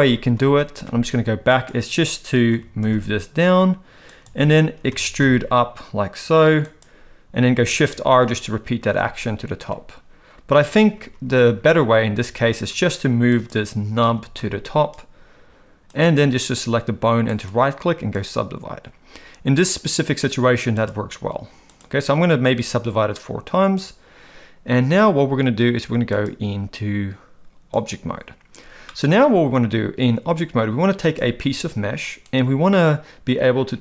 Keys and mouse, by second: 0.4 ctrl+z, 2.5 g, 4.9 e, 7.8 shift+r, 8.2 shift+r, 8.8 shift+r, 10.8 ctrl+z, 11.1 ctrl+z, 11.4 ctrl+z, 11.8 ctrl+z, 12.2 ctrl+z, 13.4 click, 14.0 g, 17.4-18.3 right drag, 20.2 click, 20.9 click, 26.3-27.9 drag, 28.9-29.5 middle drag, 31.5 g.